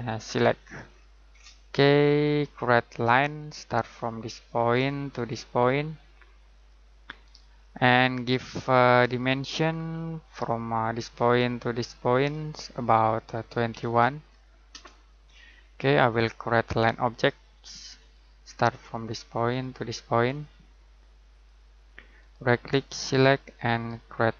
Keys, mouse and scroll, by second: 0.2 click, 0.7 scroll down 1, 0.8-1.2 scroll up 1, 1.8-2.4 scroll down 1, 2.4-3.4 scroll up 1, 3.4 click, 7.2 right click, 7.8 click, 9.6-10.8 scroll down 1, 10.8 click, 13.5-14.3 typing, 16.1-16.4 scroll down 1, 16.4-17.9 scroll up 1, 17.9 click, 22.1 right click, 23.0 click.